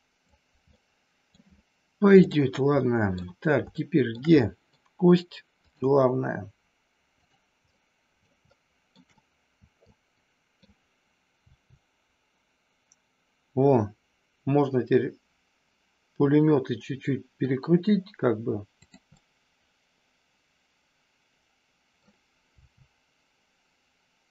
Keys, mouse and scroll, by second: 0.7 middle click, 2.2 click, 2.8 middle click, 3.7 scroll up 1, 3.8 shift+middle click, 4.3 scroll up 1, 4.6 middle click, 7.7 middle click, 8.5 shift+middle click, 9.1-10.6 middle drag, 11.5 r, 18.7 click, 19.2-21.9 middle drag, 22.5 r.